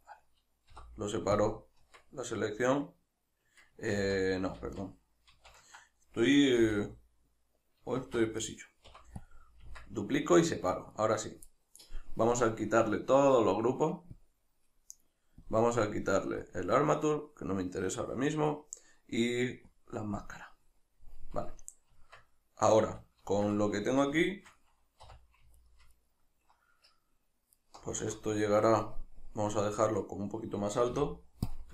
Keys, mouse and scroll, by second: 0.0 right click, 0.7 p, 4.1 ctrl+z, 6.4 right click, 6.6 l, 8.0 shift+d, 8.5 right click, 8.9 p, 10.2 right click, 10.7 right click, 11.0 right click, 12.4-23.3 drag, 21.9 Tab, 23.3-25.6 shift+middle drag, 25.0 3, 25.6 alt+right click, 26.0-27.7 alt+shift+right drag, 30.9 x.